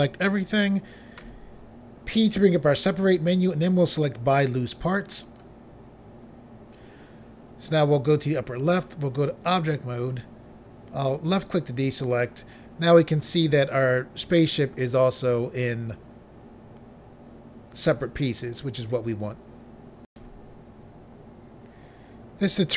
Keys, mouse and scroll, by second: 1.1 p, 5.2 click, 8.6 click, 9.3 click, 9.5 click, 11.2 click, 20.1 Pause.